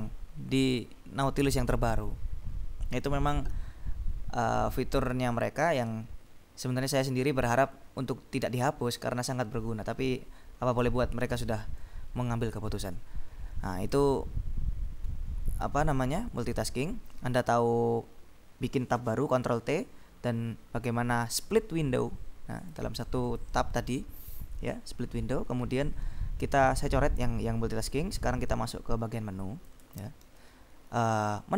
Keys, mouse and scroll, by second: 12.0-14.5 drag, 16.5 click, 22.8-24.0 drag, 24.3 click, 28.4-30.2 drag, 30.3 ctrl+b.